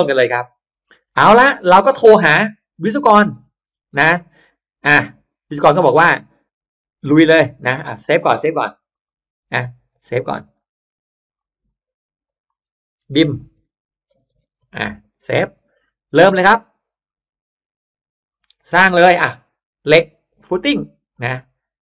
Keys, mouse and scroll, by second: 0.2 shift+click, 0.8 shift+scroll up 1, 1.0 shift+right click, 1.5 middle click, 1.7 scroll up 1, 1.8 right click, 1.8 scroll down 1, 2.0 middle click, 2.4-3.5 scroll up 2, 2.8 middle click, 3.6 middle click, 3.8 middle click, 5.4 click, 7.9 click, 8.8 click, 11.2 click, 12.1 click, 12.9 b, 13.4 i, 14.1 m, 14.8 Return, 17.0 click, 19.0 click, 20.4 click.